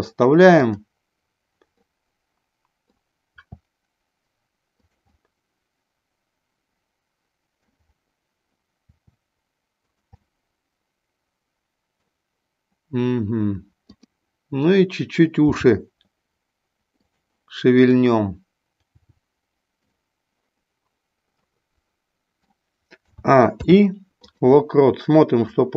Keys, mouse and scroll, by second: 0.4 click, 1.8-3.1 middle drag, 3.3 r, 5.2-7.7 middle drag, 8.8 r, 10.2-12.1 middle drag, 13.8 click, 15.6 g, 17.1 click, 17.7 click, 18.8 g, 21.5-22.6 middle drag, 21.5 scroll up 1, 22.9 a, 23.4 i, 25.4-25.7 drag.